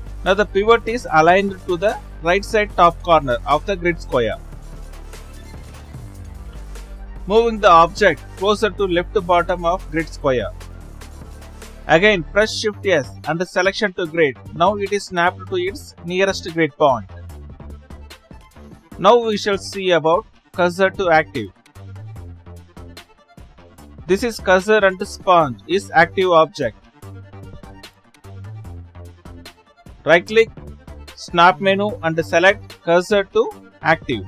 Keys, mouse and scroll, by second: 1.4 right click, 1.8 right click, 1.8-2.1 scroll up 3, 2.5-3.2 scroll down 4, 3.3-4.4 scroll down 1, 5.5 shift+s, 7.0 shift+Tab, 7.3 click, 8.1-9.1 right drag, 9.4 right click, 10.7-13.8 right drag, 18.2-26.2 middle drag, 27.0 Left, 27.5 Left, 28.0 Left.